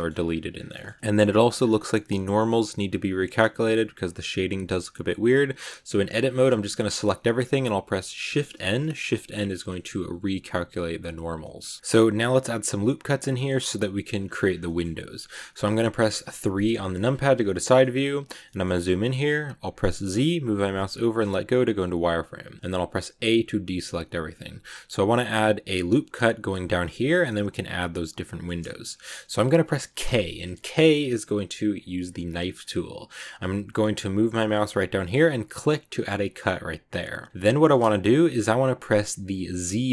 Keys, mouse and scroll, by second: 0.0 scroll up 1, 0.1-0.5 scroll down 9, 0.6 shift+middle click, 1.5 scroll up 4, 1.9-4.6 middle drag, 4.6 Tab, 5.7 a, 7.0 shift+n, 8.2 shift+n, 9.6 click, 9.9-11.2 drag, 11.2 scroll down 2, 11.3-12.5 middle drag, 12.5 scroll up 1, 13.1 scroll down 2, 13.2 middle click, 14.0 scroll up 2, 14.4 scroll down 2, 14.5-16.5 middle drag, 16.5 KP_3, 17.2 click, 17.5 shift+middle click, 17.8 scroll up 2, 18.3-20.0 shift+middle drag, 20.0 z, 23.6 click.